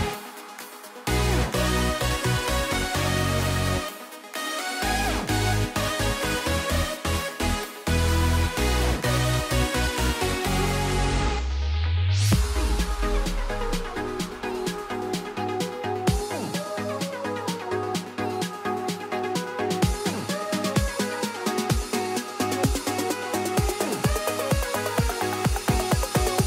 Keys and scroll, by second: 18.7 ctrl+t.